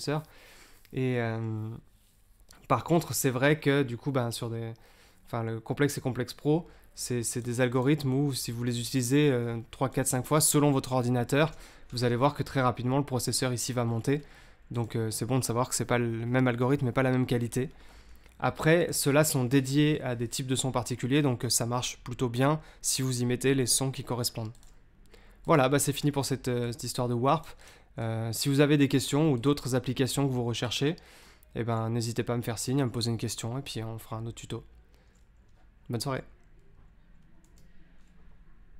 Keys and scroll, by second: 37.4 super+Tab.